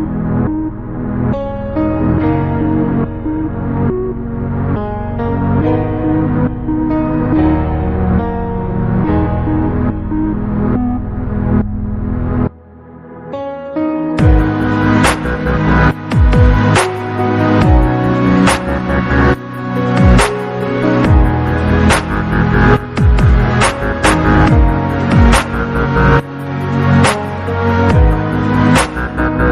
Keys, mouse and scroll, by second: 0.1 alt+click, 1.1 g, 4.2 click, 4.9 click, 5.4-5.9 scroll up 1, 5.9 alt+z, 6.5 click, 7.4 click, 9.0 x, 10.4 scroll down 2, 10.6 Tab, 11.2 alt+z, 12.2 click, 13.8-14.6 scroll down 5, 14.6-15.2 scroll up 3, 15.2 s, 17.8 click, 18.4 s, 20.3-20.7 scroll down 2, 20.7 click, 21.6-22.3 scroll up 11, 22.5 click, 23.0-23.6 scroll down 3, 23.6 Tab, 24.3 alt+click, 25.9 click, 26.7 click, 27.4 click, 28.0 g.